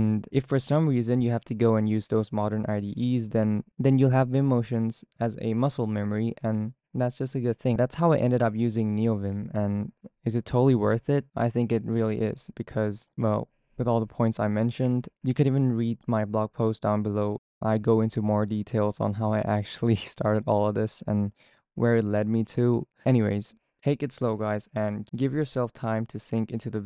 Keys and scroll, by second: 0.0-8.5 typing.